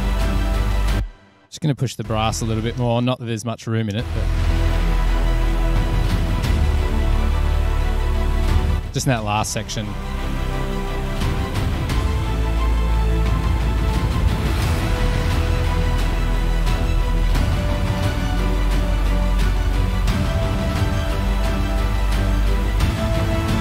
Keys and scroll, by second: 0.0 super+=, 1.2 space, 2.2 space, 3.1 space, 4.2 space.